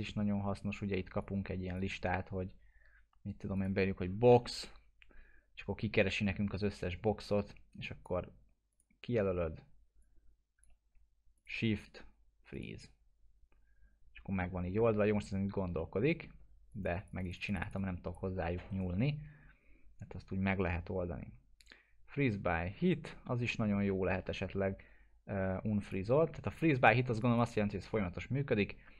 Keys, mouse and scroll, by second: 4.1-5.2 typing, 6.1-8.2 drag, 12.5 click, 15.7-16.4 middle click, 16.4-16.7 scroll down 1, 16.7 click, 18.7 right click, 25.8 click, 28.6-28.9 scroll up 1.